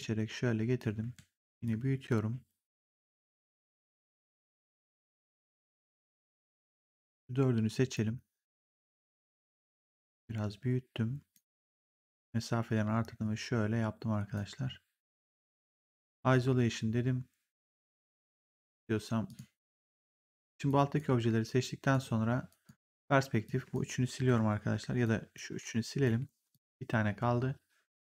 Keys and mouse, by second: 1.5 click, 5.9 click, 7.1 click, 8.9 r, 10.0 click, 11.7 click, 15.9 ctrl+1, 19.2 click, 20.6 click, 21.8 right click, 22.4 click, 24.9 click, 25.5 Delete, 25.8 click, 26.0 Delete, 26.4 click, 27.9 right click.